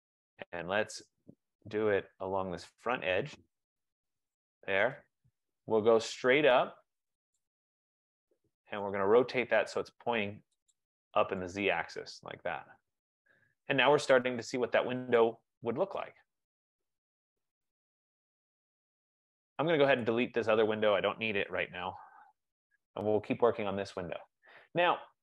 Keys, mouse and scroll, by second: 0.6 right click, 1.1-1.8 typing, 1.3-2.1 scroll, 2.6 click, 4.9 click, 7.4 shift+click, 9.0-9.3 scroll, 10.8 shift+click, 14.5 right click, 15.5 click, 16.4-17.2 scroll, 17.7 F15, 17.8 middle click, 18.4 right click, 20.1 click, 21.3-21.6 typing, 21.8 Delete, 22.0 Return, 23.2-24.3 scroll.